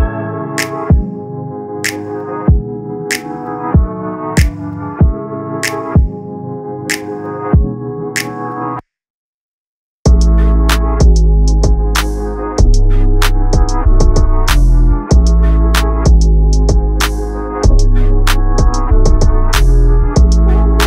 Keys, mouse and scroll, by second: 1.4 drag, 1.6 scroll up 3, 2.4-2.9 scroll down 3, 2.9 click, 3.2 click, 3.4 scroll down 2, 4.3 click, 9.9-11.7 drag, 13.4-14.0 scroll up 2, 14.0-15.8 drag, 17.0 ctrl+a, 19.2-19.5 scroll up 1, 19.9 click.